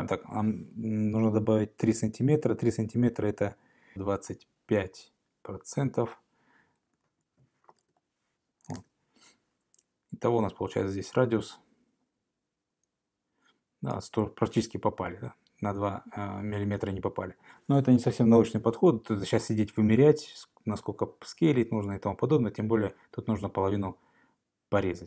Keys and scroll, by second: 7.1 Return, 8.7-9.5 typing.